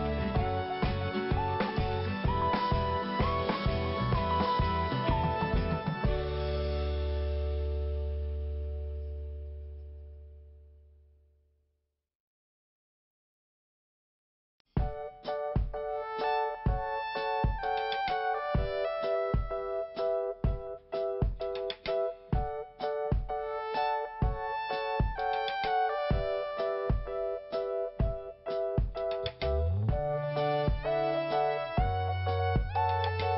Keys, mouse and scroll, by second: 0.8 click, 2.1 scroll down 1, 2.8 click, 6.4 click, 6.5 click, 7.1 click, 7.1 click, 7.7 click, 10.0-10.3 scroll down 1, 11.3 click, 14.5 5, 16.2 click, 16.6 scroll up 1, 17.4 click, 17.5 click, 18.0 click, 19.9 scroll up 1, 21.5 click, 21.5 click, 22.5 scroll up 1, 23.9 click, 24.0 click, 24.6 click, 27.6 click, 27.6 click, 28.2 click, 29.4 scroll down 1, 30.6 click, 31.5 scroll down 1, 32.2 scroll up 1, 33.0 scroll down 1.